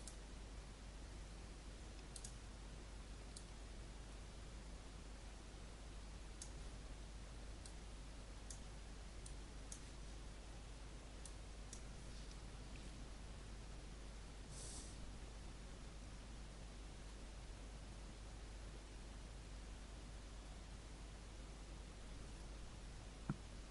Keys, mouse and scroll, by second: 11.5 click.